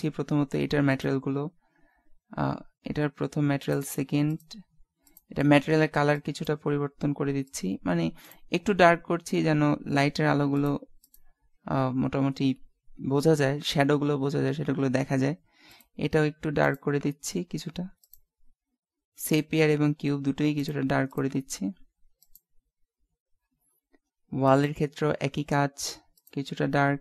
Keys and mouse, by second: 0.9-2.5 drag, 3.7 click, 8.3-12.8 drag, 15.7-17.3 drag, 19.2-22.7 drag, 24.7-26.1 right drag, 26.1-27.0 drag.